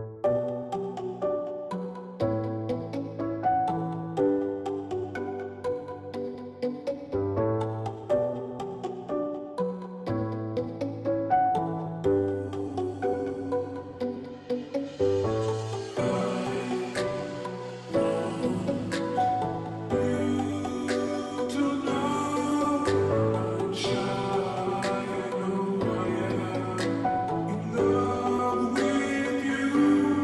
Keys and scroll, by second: 6.0 Return, 7.5 Down, 9.4 ctrl+j, 14.4 ctrl+t.